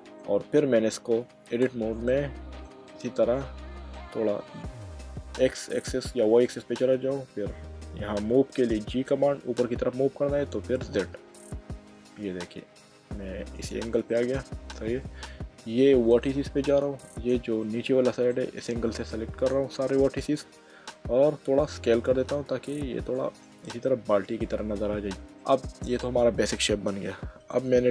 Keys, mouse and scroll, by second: 0.4 click, 1.6 Tab, 2.1 middle click, 5.9 click, 8.8 g, 10.9 z, 13.6 ctrl+click, 14.1 middle click, 16.1 click, 17.6 middle click, 21.6-22.3 typing, 23.2 click, 23.8 middle click, 25.1 middle click, 27.5 click.